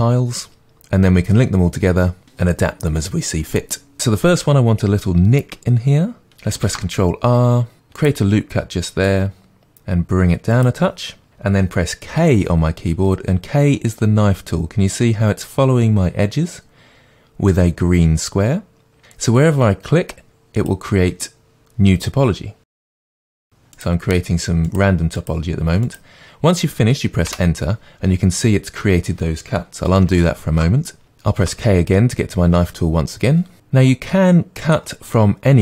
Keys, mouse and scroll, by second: 4.0 Tab, 6.6 ctrl+r, 10.6 click, 12.1 k, 27.4 Return, 30.4 ctrl+z, 31.4 k.